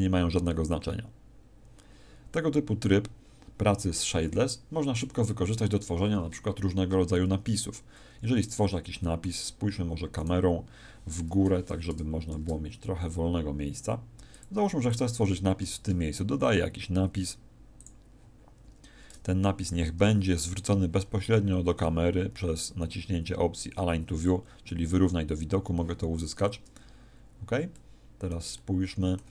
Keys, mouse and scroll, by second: 5.5 Escape, 8.4 right click, 9.0 middle click, 10.2 right click, 11.2 KP_0, 12.2 shift+f, 14.4 click, 14.8 click, 15.6 shift+a, 19.9 t, 24.2 click, 27.7 middle click.